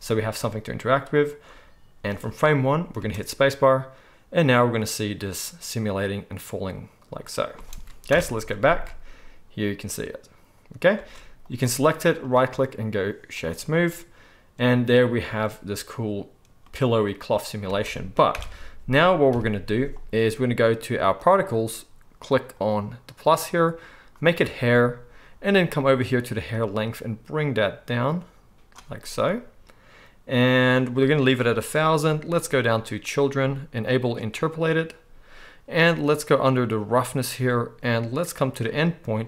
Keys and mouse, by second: 2.2-11.5 drag, 2.2-21.2 right drag, 2.9 space, 7.6 space, 8.1 shift+Left, 8.7 space, 11.0 space, 15.2 space, 17.7 space, 18.3 shift+Left, 19.3 KP_1, 21.2 middle click, 21.4-22.7 right drag, 22.7-24.3 middle drag, 24.3-26.1 right drag, 26.1-34.5 middle drag, 34.5-36.9 right drag, 36.9-39.2 middle drag.